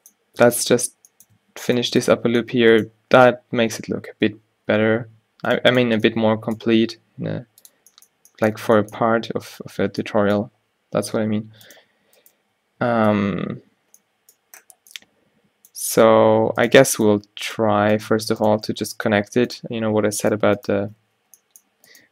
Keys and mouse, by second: 0.6 o, 2.2 f, 5.1 alt+w, 7.1 g, 11.3 f, 13.2 alt+w, 16.7-22.1 right drag, 18.7 f, 21.2 f.